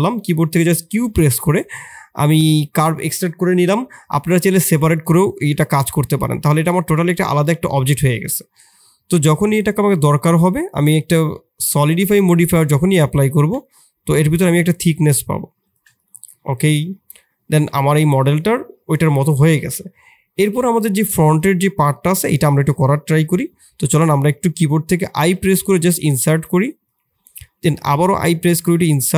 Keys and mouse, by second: 0.5 q, 5.5 Tab, 6.2 Tab, 6.5 click, 7.0 g, 7.9-8.5 middle drag, 16.2-17.2 middle drag, 17.5-18.4 middle drag, 19.3 middle click, 20.4 click, 20.9 Tab, 21.9 shift+click, 23.6 [, 25.1 o, 25.6 i, 27.4 i.